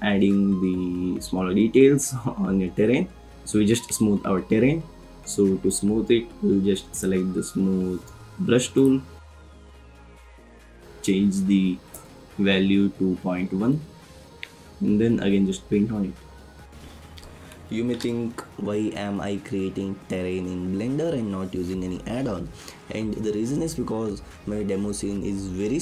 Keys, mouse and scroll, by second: 10.6-12.0 drag, 13.7 click, 19.4 click.